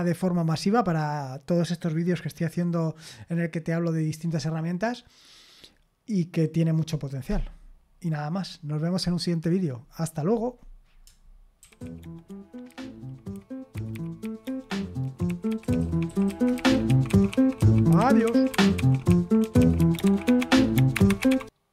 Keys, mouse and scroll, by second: 11.6 super+x, 14.3 click, 15.5-16.7 typing.